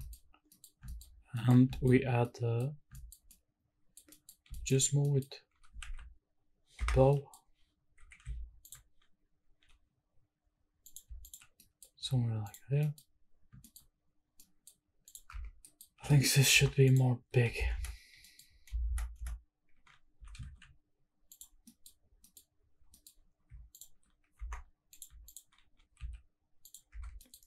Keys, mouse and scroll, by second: 0.0 shift+middle drag, 0.2 scroll up 1, 0.5 middle click, 0.9 shift+middle drag, 1.2 scroll down 1, 1.4 middle drag, 1.6-2.0 shift+scroll up 2, 1.7 shift+middle drag, 2.0 scroll down 1, 2.2-2.6 middle drag, 2.6 scroll up 2, 2.9 shift+middle drag, 3.3-4.0 middle drag, 4.1 middle drag, 4.5 shift+middle drag, 4.5 scroll up 1, 4.8 scroll down 1, 5.0 middle drag, 5.5 g, 5.9 shift+z, 6.8 Escape, 6.9 scroll down 1, 7.1 middle drag, 8.0 KP_7, 8.2 z, 9.0-9.6 scroll up 4, 9.6 g, 10.9 click, 11.5 scroll down 1, 11.6 middle drag, 12.0-12.4 scroll down 2, 12.4 click, 12.8 middle click, 13.0-13.5 scroll up 2, 13.6 shift+middle click, 13.9-14.4 scroll up 2, 14.4 middle click, 14.6-15.0 scroll up 2, 15.0 click, 15.3 Tab, 15.6-16.0 scroll up 2, 15.6 middle click, 16.1 shift+middle click, 16.5 3, 16.8 alt+click, 17.6 ctrl+KP_Add, 17.7 ctrl+KP_Add, 18.2 middle click, 18.8 ctrl+KP_Add, 19.1 ctrl+KP_Add, 20.1 s, 20.5 shift+z, 21.3 click, 21.5 scroll down 1, 21.7 middle click, 22.1 scroll down 1, 22.2 middle click, 22.8 scroll down 1, 23.0 middle click, 23.2 scroll up 2, 23.7 alt+click, 24.4 2, 24.9 click, 25.2 alt+click, 25.6 g, 25.9 z, 26.6 click, 26.9 Tab, 27.2 middle click.